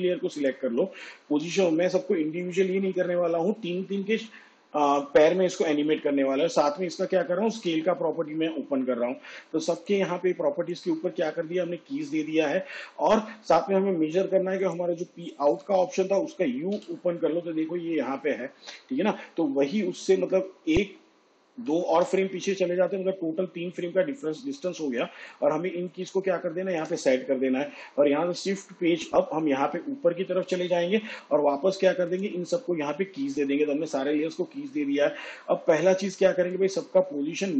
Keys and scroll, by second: 2.0 p, 3.4 p, 8.0 shift+s, 16.2 p, 17.5 u, 21.2 ctrl+Right, 28.7 shift+Page_Up.